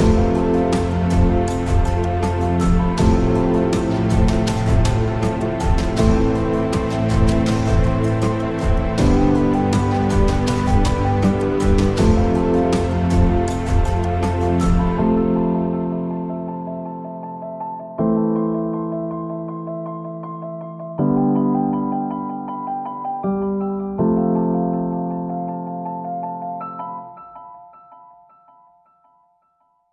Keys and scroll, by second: 0.3-1.2 typing, 3.5 e, 4.9 ctrl+z, 5.5-10.5 typing, 12.0 Tab, 12.8 Tab, 15.3 s, 15.7 g, 15.7 z, 17.2 shift+s, 17.8 Tab, 18.1 shift+a, 23.0-25.0 typing, 28.6 s.